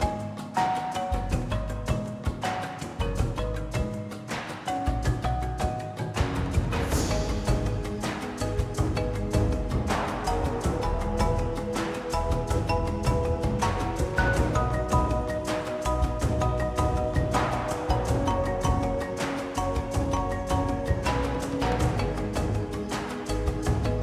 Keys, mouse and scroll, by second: 0.1-0.6 shift+middle drag, 0.5 click, 2.4-3.4 drag, 3.4-4.2 scroll down 11, 4.2 click, 4.4-4.7 scroll down 7, 4.7-5.2 drag, 5.2-7.1 middle drag, 6.5-7.1 scroll up 4, 7.1 click, 8.1 ctrl+s, 8.4 scroll down 2, 8.6-8.9 middle drag, 8.9 click, 9.1-9.9 middle drag, 9.9 shift+a, 11.8 s, 12.3 ctrl+a, 13.2 click, 14.1 ctrl+p, 15.0 click, 15.2 r, 17.4 r, 20.1 ctrl+s, 20.2 middle click, 20.3-20.7 scroll up 4, 20.7-21.1 shift+middle drag, 21.1 click, 21.1 scroll down 1, 21.4-21.9 middle drag, 21.9-22.5 scroll down 3, 22.5 middle drag, 22.8 click, 23.4 scroll down 1, 23.6 click.